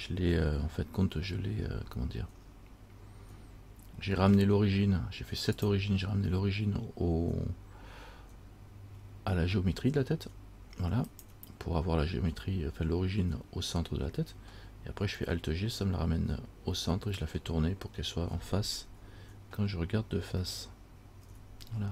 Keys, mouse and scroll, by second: 5.8 click, 17.6-21.2 scroll up 2, 21.4 KP_1.